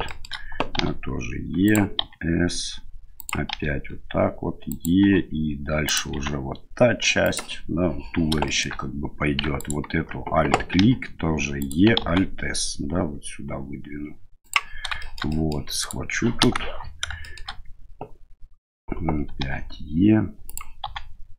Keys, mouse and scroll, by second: 0.0 shift+middle click, 0.7 e, 2.0 s, 3.5 e, 5.0 e, 6.1 s, 8.4 middle click, 9.5 alt+right click, 10.7 e, 12.0 alt+s, 15.0 shift+middle click, 15.3 middle click, 15.8 right click, 16.4 KP_1, 17.2 middle click, 19.4 e, 20.8 s.